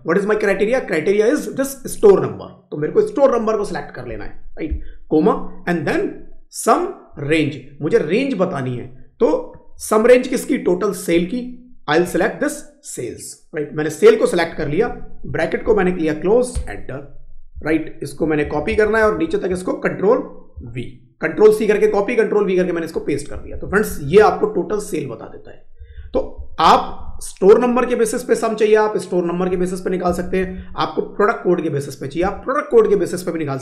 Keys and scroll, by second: 17.4 Up, 18.3 ctrl+c, 20.4 ctrl+v, 23.2 Down, 23.8 Up, 25.7 Down, 26.3 Up, 26.8 Left, 29.9 Down, 30.5 Down, 32.1 Right.